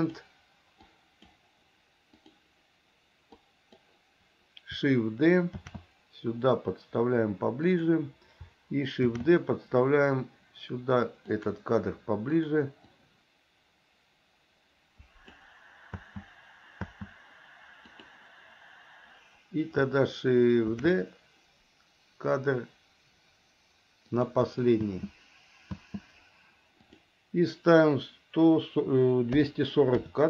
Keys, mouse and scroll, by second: 0.2 click, 1.1 click, 2.4 click, 3.7 click, 5.9 shift+d, 9.3 shift+d, 12.6 click, 13.2-15.6 drag, 16.2 space, 17.0 space, 18.2 click, 21.0 shift+d, 25.0 space, 25.9 space, 27.0-30.2 drag.